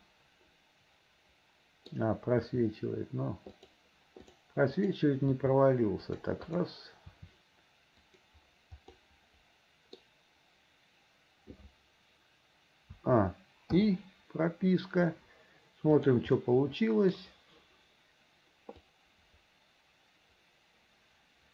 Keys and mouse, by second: 2.5 r, 5.4 r, 6.6 click, 7.2 r, 9.1-10.2 drag, 13.1 a, 13.9 i, 16.1 click, 16.5 middle click, 19.0-21.5 drag.